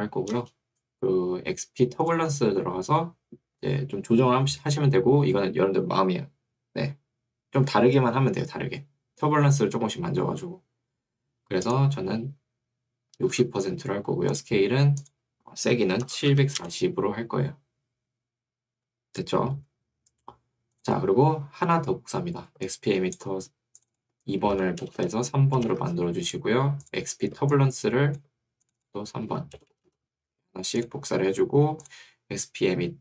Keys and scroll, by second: 0.4 Return, 13.2 6, 16.0-16.9 typing, 24.6 Right, 24.8 BackSpace, 25.8 3, 29.4 Right, 29.6 BackSpace, 30.2 3.